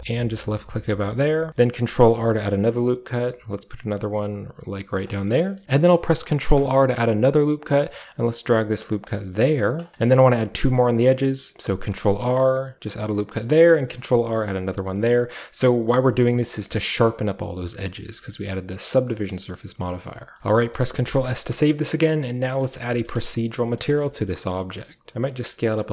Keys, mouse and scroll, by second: 1.2-2.6 scroll up 1, 1.6 ctrl+r, 2.6-4.7 ctrl+drag, 4.9 click, 5.6 ctrl+r, 5.6 ctrl+z, 6.3 ctrl+r, 7.3 ctrl+click, 9.6 click, 9.8-10.1 scroll down 1, 10.1-11.7 shift+middle drag, 10.2-10.8 shift+scroll up 1, 11.7 ctrl+r, 12.0 ctrl+click, 13.2 click, 13.6 r, 13.9 ctrl+click, 15.8 ctrl+click, 16.0 Tab, 16.5-17.4 shift+scroll up 1, 16.6 Tab, 17.4 middle drag, 17.4 scroll down 1, 17.5 Tab, 17.9-18.3 middle drag, 18.1 scroll down 1, 18.1 a, 19.3 middle drag, 19.5 shift+middle drag, 19.8 shift+middle drag, 20.0 shift+middle drag, 20.3 shift+scroll up 1, 20.4-21.4 scroll down 1, 20.6-21.3 middle drag, 21.0 ctrl+s, 21.4 ctrl+scroll up 1, 23.1 Tab, 23.6-24.6 typing, 24.2-25.5 scroll up 1.